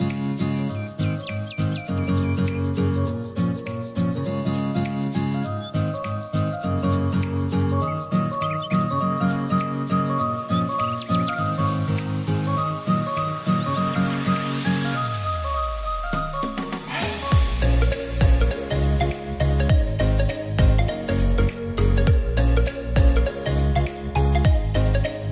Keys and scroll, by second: 0.6-3.4 typing, 5.3 e, 14.1-15.4 typing, 20.4 r, 22.6 e.